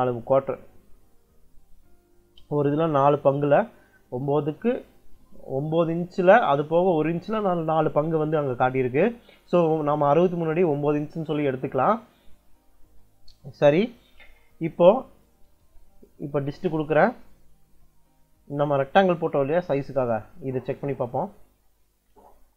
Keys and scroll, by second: 15.5 d, 15.9 i, 16.4 space.